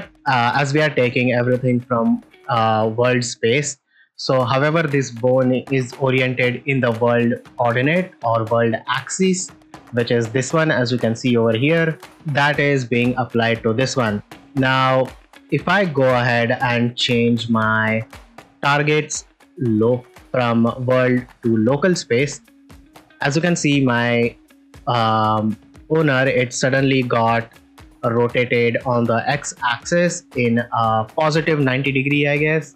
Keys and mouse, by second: 3.9 click, 5.8 r, 6.0 r, 6.7 right click, 7.7 ctrl+middle drag, 8.1-9.1 middle drag, 9.4 ctrl+middle drag, 12.6 click, 17.4 ctrl+middle drag, 19.7-21.8 drag, 22.6 ctrl+middle drag, 23.1 middle drag, 23.6 ctrl+middle drag, 30.6-30.9 middle drag.